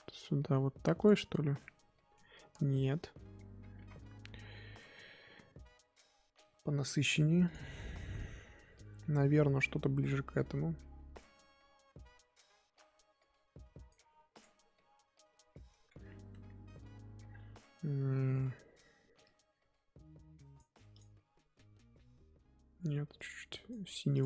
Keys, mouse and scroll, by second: 1.6-3.8 middle drag, 3.8 ctrl+z, 6.0-8.7 drag, 8.7 scroll down 1, 9.1-13.2 middle drag, 13.2-14.8 drag, 14.8-15.8 middle drag, 15.8-16.4 scroll up 2, 19.2-24.2 drag.